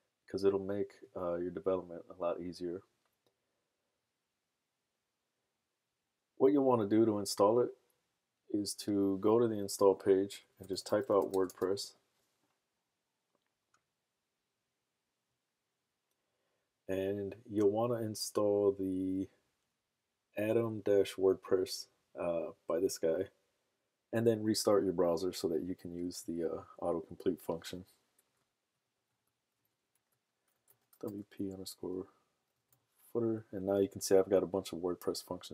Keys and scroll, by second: 10.2-11.9 typing, 30.2-33.2 typing.